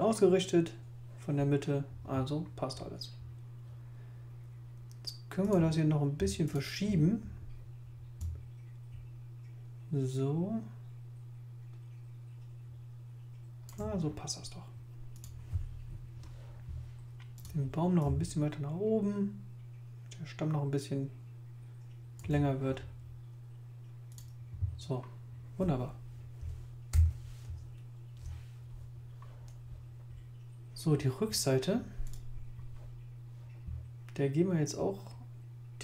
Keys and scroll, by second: 26.9 super+0.